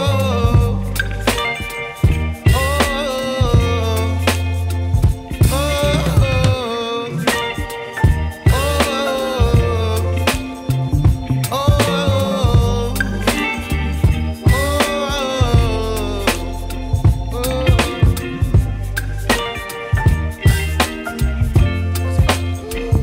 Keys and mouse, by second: 0.0 2, 0.2 click, 2.0-2.6 typing, 3.3 click, 4.2-6.8 typing, 8.2 click, 8.5-9.5 typing, 9.7 click, 10.8-13.0 typing, 13.2 click, 15.1-23.0 typing, 15.4 click, 16.9 click, 18.2 ctrl+z, 18.7 click, 20.5 click, 22.1 click, 22.5 click.